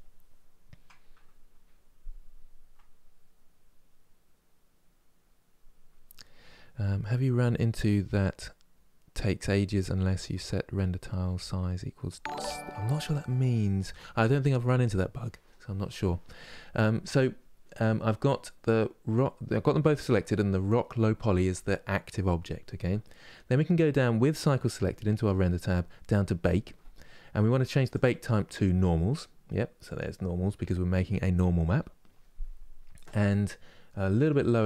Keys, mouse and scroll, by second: 29.7-34.6 drag.